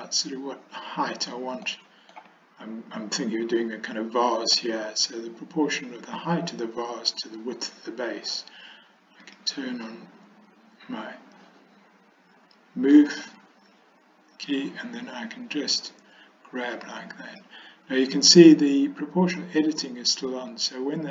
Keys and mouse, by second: 1.7-2.2 shift+middle drag, 3.8-4.7 middle drag, 9.3 click, 14.5 click, 20.6-21.1 drag.